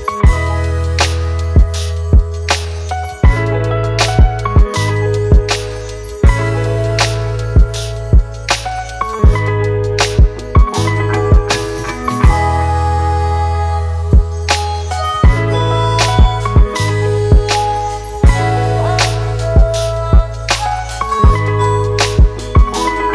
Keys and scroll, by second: 0.0-1.7 typing, 4.1 Return.